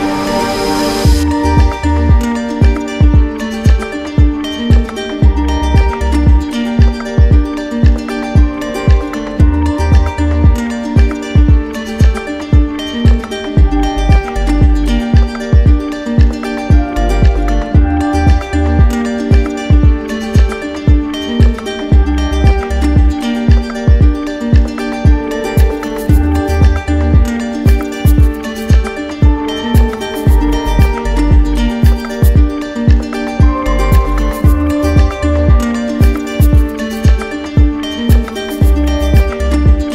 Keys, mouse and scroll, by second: 4.4-5.5 right drag, 9.6-10.7 drag, 11.3-13.3 drag, 14.0-16.2 drag, 16.5-19.4 drag, 21.8 click, 22.3 shift+click, 23.1 alt+click, 25.7 click, 26.4 click, 27.0 ctrl+z, 27.6 click, 28.1 click, 28.6 click, 29.7 click, 30.6 click, 31.4 click, 33.5 right click, 33.9 shift+right click, 36.0 right click, 36.4 shift+right click, 38.9 ctrl+click, 39.8 r.